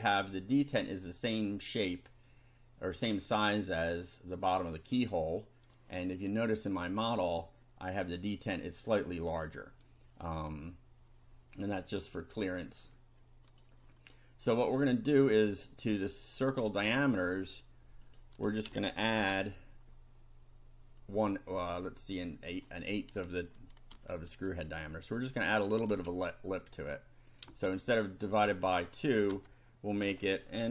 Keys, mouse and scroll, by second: 5.1 click, 6.8 click, 13.5 click, 16.4 click, 18.1 click, 18.7 space, 19.2 shift+=, 21.1-22.8 drag, 23.9 ctrl+c, 25.6 ctrl+click, 25.9 ctrl+v, 27.3 click, 27.5 space, 28.4 click, 29.3 BackSpace.